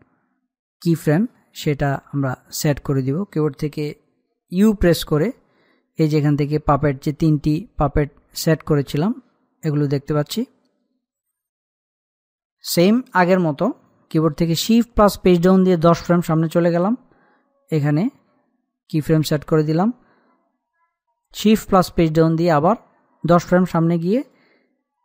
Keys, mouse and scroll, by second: 0.0-2.0 scroll up 1, 3.1 click, 6.3-8.1 scroll down 1, 15.9 Page_Down, 18.3 click, 22.3 shift+Page_Down, 24.2 click.